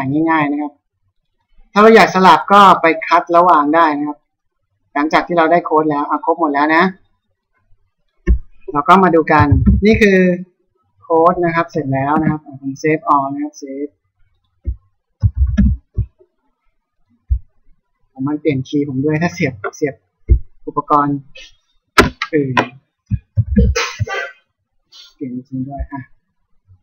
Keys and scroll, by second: 9.2 ctrl+m, 9.7 ctrl+o, 12.2 Escape, 15.4 ctrl+m, 15.6 ctrl+o, 23.0 ctrl+m, 23.6 ctrl+o.